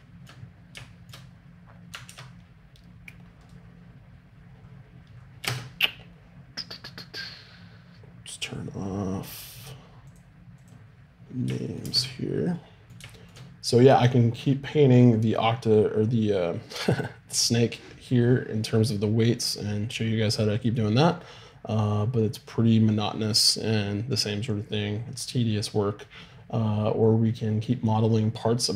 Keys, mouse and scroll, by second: 2.1 ctrl+Tab, 5.4 shift+space, 10.9 click, 11.8 shift+space.